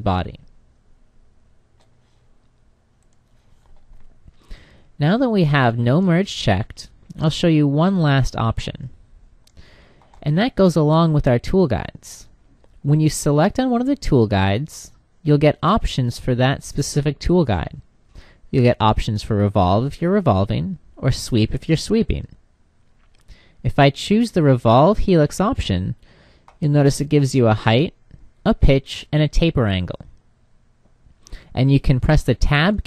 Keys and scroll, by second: 31.8 Tab.